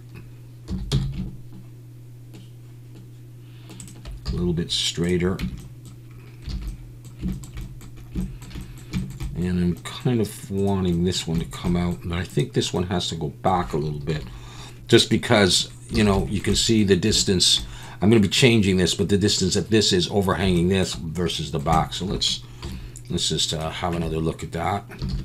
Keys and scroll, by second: 0.7 s, 0.9 x, 4.3 z, 5.4 Tab, 6.5 alt+a, 14.1 KP_7, 16.0 alt+a, 22.6 KP_7, 23.9 Tab, 25.1 alt+a.